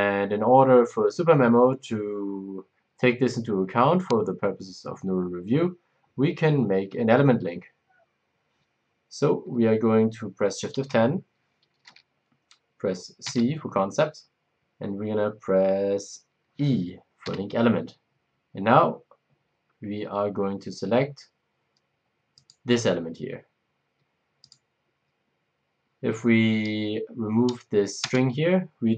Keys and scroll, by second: 10.7 shift+F10, 17.2 e, 28.0 BackSpace.